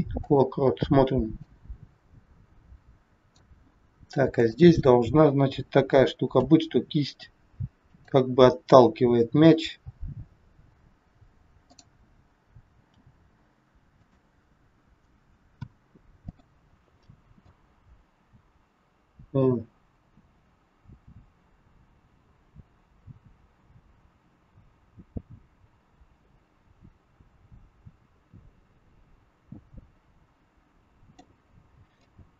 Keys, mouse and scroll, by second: 1.4 click, 4.4 click, 6.4 r, 11.8 click, 13.0 g, 15.0 a, 15.5 i, 17.4 click, 32.0 click.